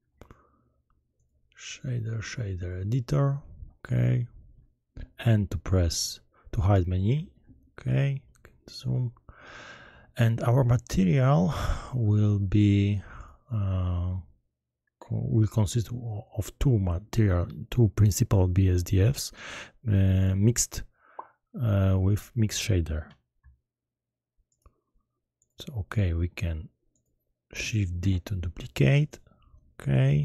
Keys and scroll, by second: 7.1 n, 27.9 shift+d.